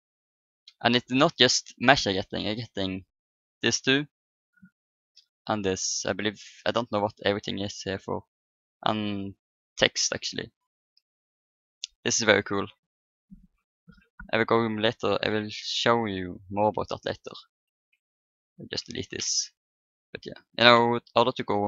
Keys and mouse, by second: 10.6-12.3 drag, 15.3 Delete, 18.1 click, 18.2 right click, 18.7-19.8 drag, 18.9 Delete, 21.3 ctrl+n.